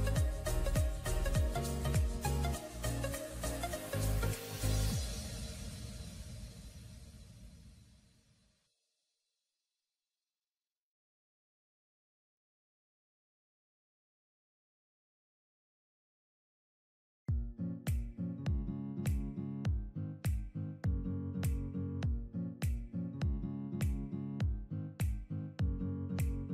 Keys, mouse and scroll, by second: 0.0 scroll down 1, 2.4 double click, 5.5 double click, 5.8-6.1 scroll up 1, 6.7 typing, 12.5 scroll up 1, 21.1 double click.